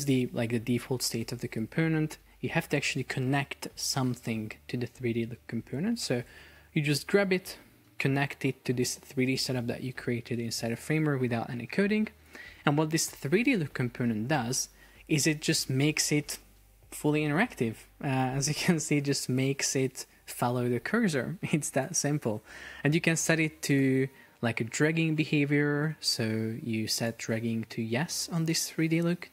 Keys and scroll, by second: 18.7 super+p, 21.1 Escape.